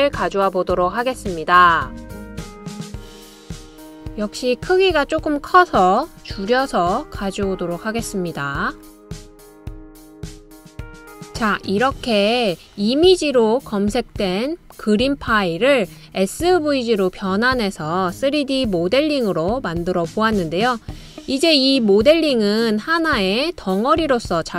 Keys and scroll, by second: 5.9-6.5 typing.